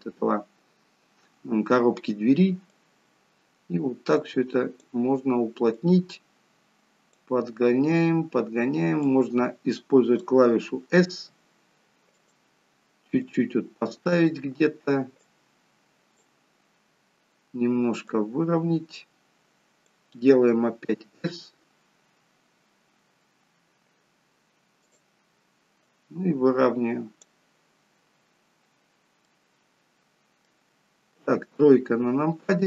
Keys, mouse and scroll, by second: 2.8 click, 11.1 s, 13.2 click, 15.3 click, 20.9 s, 25.8 click, 28.1-28.8 scroll up 3, 28.8-29.3 scroll down 1, 29.3 middle click, 29.3-29.7 scroll down 1, 31.2 KP_3, 32.3-32.6 scroll down 1.